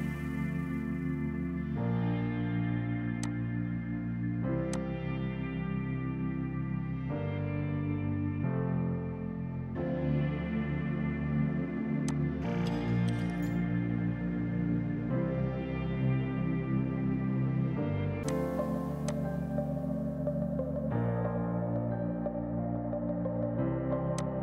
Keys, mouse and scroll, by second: 3.3 click, 4.3-5.2 typing, 4.8 alt+click, 5.6 Delete, 12.1 click, 14.4 typing, 18.3 click, 21.4 typing, 24.2 click.